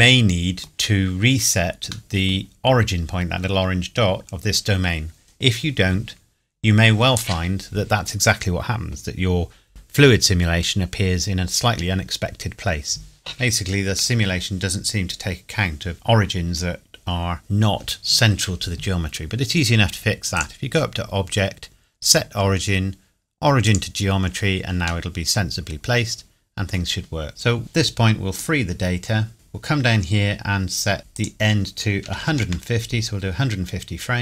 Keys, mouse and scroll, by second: 2.6 scroll up 1, 3.8 scroll down 1, 4.2 Tab, 20.3 click, 23.6 click, 25.0 middle click, 28.3 click, 29.4 scroll down 1, 31.1 click, 32.0 KP_1, 32.2 KP_5, 32.3 KP_0, 32.4 KP_Enter, 33.4 scroll down 1, 33.6 scroll up 1.